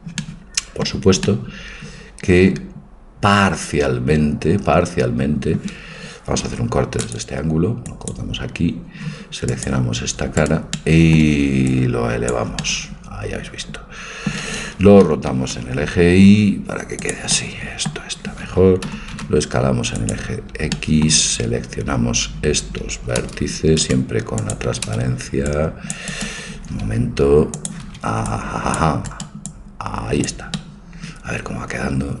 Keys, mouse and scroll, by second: 0.2 middle click, 1.4-3.5 middle drag, 6.5 ctrl+r, 9.5-11.5 drag, 10.4-12.2 right drag, 10.8-12.2 middle drag, 11.7-13.6 drag, 13.6 middle click, 15.0 r, 17.5-18.9 middle drag, 18.9 s, 23.3 c, 24.4-26.2 drag, 25.0 c, 26.5 a, 27.6-29.4 drag, 27.9 c, 29.6-30.7 drag, 30.9 click, 30.9-32.2 middle drag.